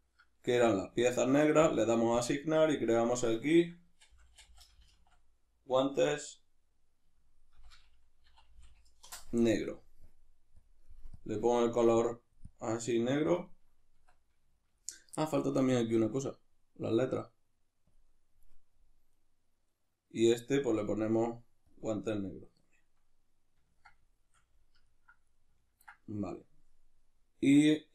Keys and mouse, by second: 0.8 click, 1.6-11.3 drag, 13.9 Tab, 14.5-17.9 shift+middle drag, 17.9 click, 19.2 right click, 20.8 click, 23.0-27.9 middle drag.